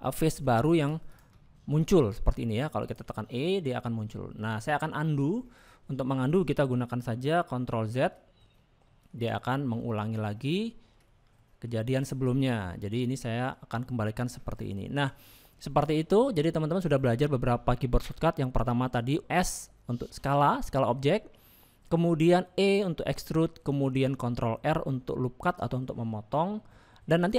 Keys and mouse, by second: 0.3 click, 2.1 middle click, 2.1 e, 4.3 middle click, 4.3 e, 9.3 ctrl+z, 11.4 middle click, 12.3 shift+middle click, 12.7 middle click, 14.4 middle click, 15.7 shift+middle click, 18.7 middle click, 23.9 middle click.